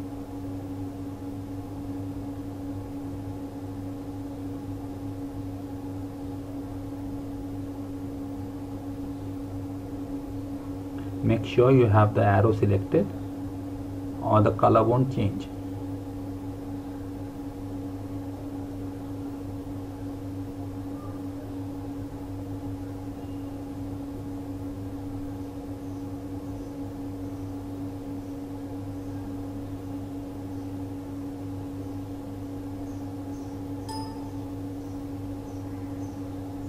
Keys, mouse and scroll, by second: 6.9 click.